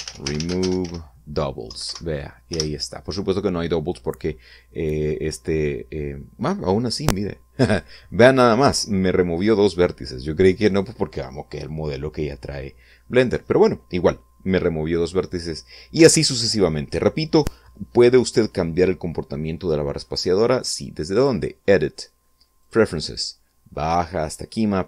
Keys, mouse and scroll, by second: 0.0-0.7 typing, 1.6 Down, 1.8 Up, 2.4 Return, 15.9 Tab, 21.1 click, 22.6 click.